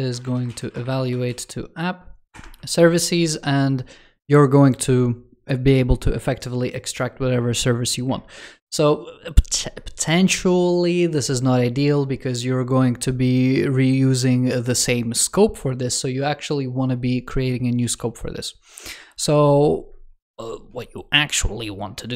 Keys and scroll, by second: 17.7 super+s.